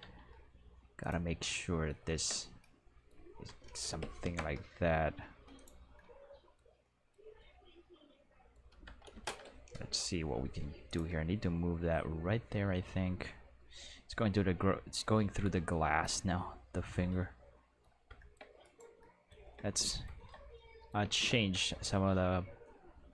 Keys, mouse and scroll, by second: 0.0 z, 1.0 click, 1.2-1.7 middle drag, 2.5-3.3 middle drag, 3.3 g, 4.2 shift+z, 5.5 click, 8.7 g, 9.0 x, 9.4 y, 10.8 click, 16.6-18.3 middle drag, 18.6 right click, 21.4 r, 21.6 x, 21.7 x.